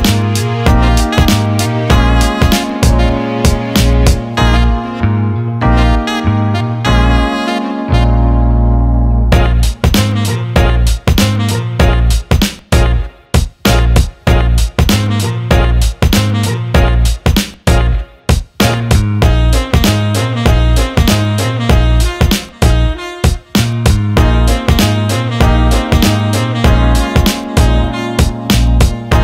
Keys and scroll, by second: 16.8 Escape, 17.9 Escape, 20.9-22.0 typing, 22.3 ctrl+z, 23.2 ctrl+z.